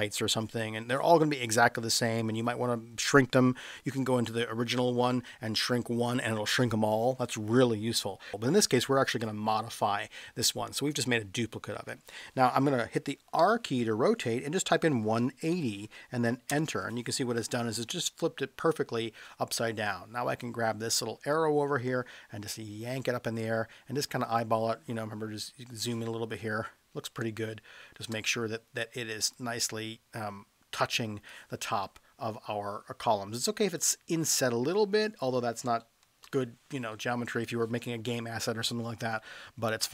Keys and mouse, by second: 13.4 r, 14.8-15.5 typing, 16.4 Return, 21.4-24.3 drag, 27.2 space, 29.4 click, 33.8 click, 35.6 space, 36.2 space.